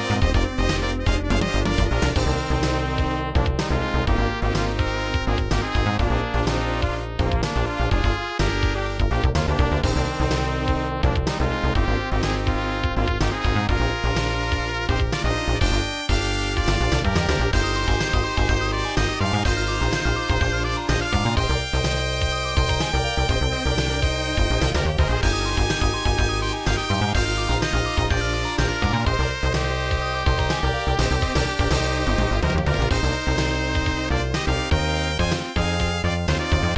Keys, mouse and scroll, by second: 0.8 click, 4.6 click, 6.4 click, 17.5 click, 17.6 click, 17.7 double click, 19.7-20.4 scroll down 2, 20.4 click, 20.5 click, 21.0 click, 21.1 click, 24.8 click, 25.8 click, 26.5 click, 26.6 click, 29.5 click, 31.1 click.